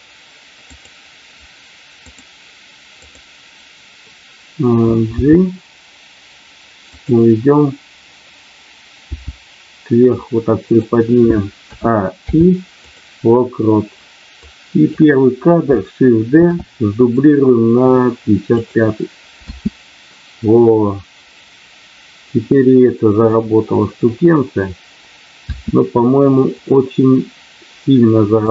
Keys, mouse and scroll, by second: 0.7 click, 2.1 click, 2.8 click, 5.1 g, 6.9 click, 9.0 g, 10.7 click, 11.5 a, 12.2 i, 14.3 click, 16.4 shift+d, 18.4 click, 19.3 space, 25.4 space, 26.5 click.